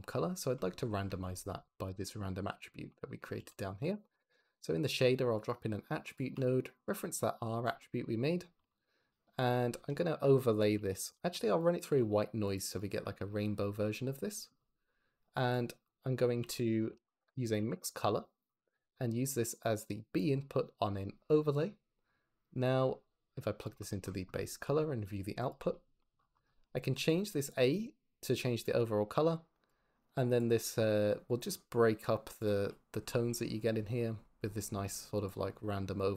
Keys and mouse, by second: 1.2 ctrl+z, 1.9 click, 3.2 shift+a, 4.2 t, 6.1 click, 8.7 ctrl+shift+click, 9.8 shift+a, 13.8 click, 15.4 click, 16.3 g, 16.9 shift+a, 19.6 drag, 20.7-21.5 drag, 23.8 click, 24.2 click, 24.6 click, 26.9 click, 30.4-32.4 drag, 35.2-36.1 drag.